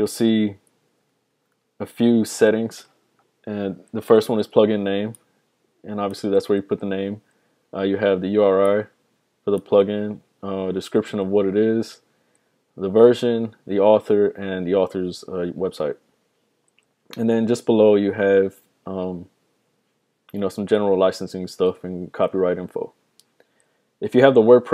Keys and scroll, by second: 1.0 super+=, 1.4 super+=, 2.1 super+=.